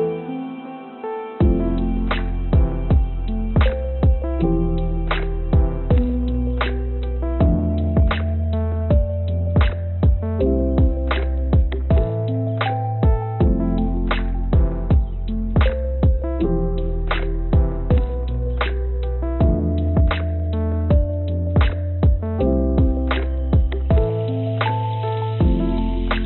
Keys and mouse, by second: 0.8-2.9 drag, 4.1 click, 6.7 click, 8.2 ctrl+d, 8.9 click, 9.4 a, 10.5 shift+d, 15.4 click, 16.9 click, 18.1 s, 19.6-22.0 drag, 25.5 click, 25.8 click, 26.0 click.